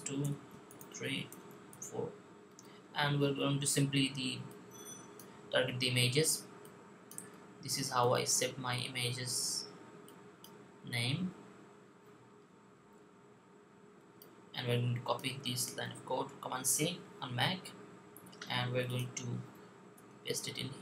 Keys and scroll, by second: 5.6 2, 6.8-8.1 typing, 10.4 5, 15.7 super+c.